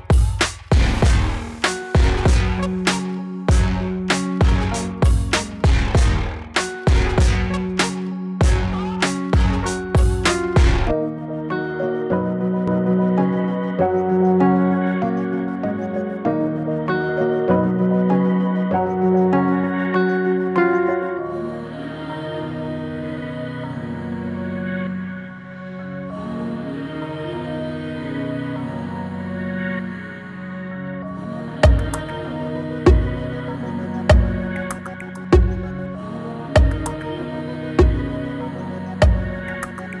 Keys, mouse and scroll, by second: 5.8 space, 6.4-8.4 drag, 9.0 space, 15.1 space, 16.0-18.9 drag, 18.9 right click, 19.9-24.0 drag, 29.1 click, 29.2-40.0 drag.